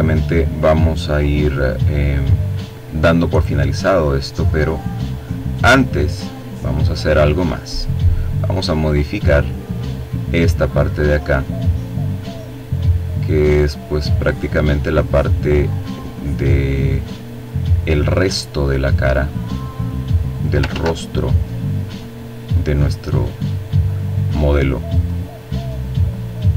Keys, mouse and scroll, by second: 0.1 click, 3.0-7.1 drag, 7.6 click, 9.7-11.8 drag, 11.9-13.2 drag, 14.4-16.1 drag, 16.2 click, 18.2 click, 19.4 ctrl+z, 20.2-21.2 drag, 21.2-22.4 drag, 22.6-23.8 drag, 24.8-26.0 drag.